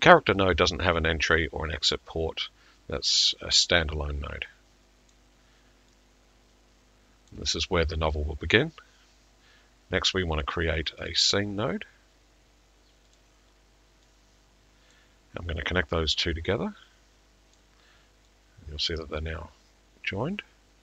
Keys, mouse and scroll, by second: 5.1 click, 7.3 click, 10.5 click, 11.1 click, 13.2 middle click, 15.0 click, 17.5 click.